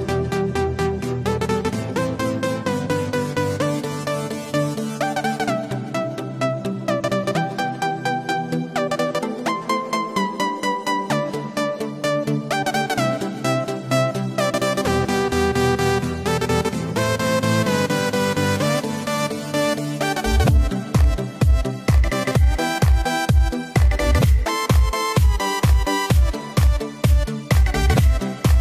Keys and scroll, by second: 8.1 super+-, 8.4 super+-, 8.9 super+-.